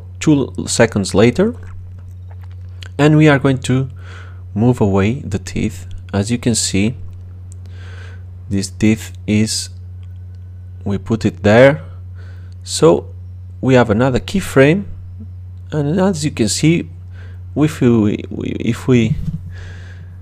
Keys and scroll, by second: 16.2 space.